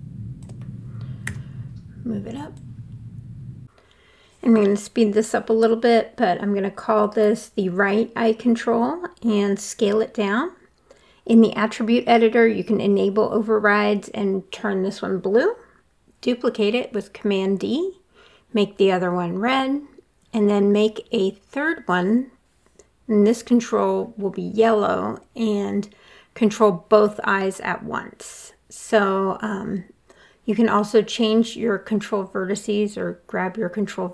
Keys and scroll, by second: 1.4 w, 6.6-9.2 typing, 7.5 Return, 15.0 super+d, 18.4 super+d, 18.7 r, 21.2 w, 28.8 f.